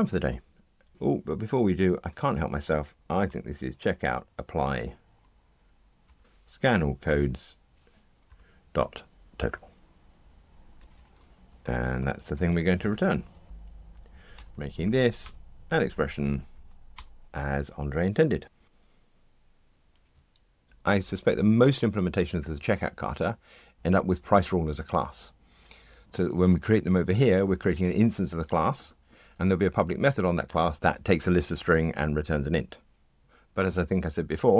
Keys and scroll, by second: 6.0 Return, 7.1 Tab, 9.4 Return, 10.7 super+BackSpace, 11.6 alt+shift+Left, 13.5 Delete, 14.3 alt+Return, 18.4 ctrl+r.